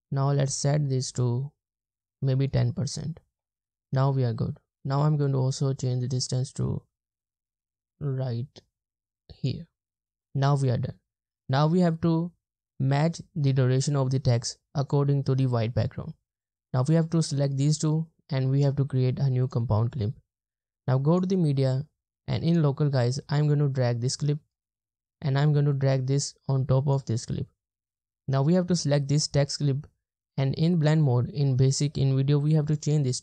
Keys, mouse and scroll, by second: 17.0 click, 17.9 right click, 24.1 click, 27.7-30.9 drag.